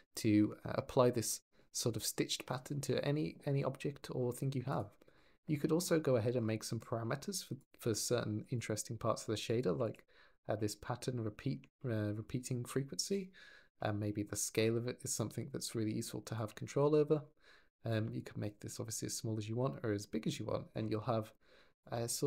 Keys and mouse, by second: 1.1-1.6 drag, 4.5 click, 7.5 click, 9.3 click, 11.2 shift+middle click, 15.0-16.2 ctrl+drag, 17.8-20.5 ctrl+drag, 21.8 ctrl+click.